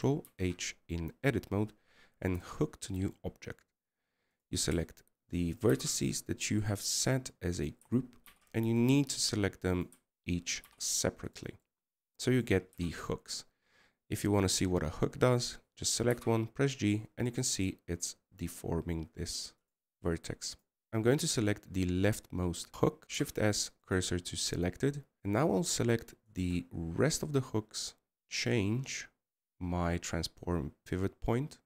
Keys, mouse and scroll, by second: 21.3 KP_0.